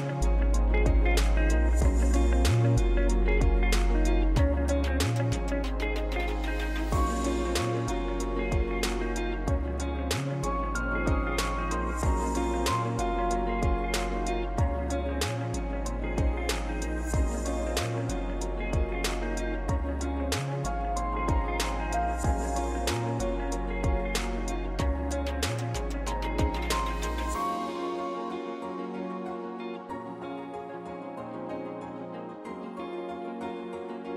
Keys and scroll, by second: 25.0 Tab.